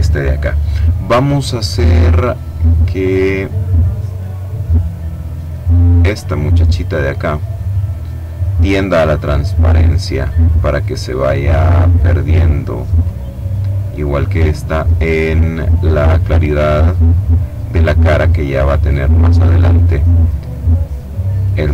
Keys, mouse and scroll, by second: 3.8 click, 5.3-6.7 drag, 8.8-10.5 drag, 12.3 click, 13.9 click, 16.3 click, 17.7-19.2 drag, 20.2-21.6 drag.